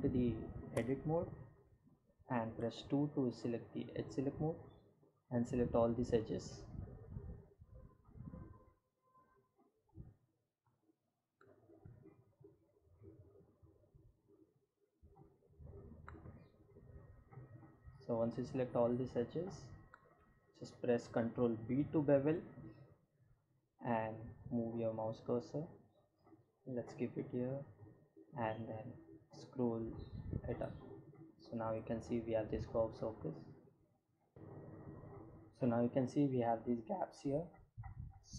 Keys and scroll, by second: 0.9 2, 20.2 ctrl+b, 29.7 Tab.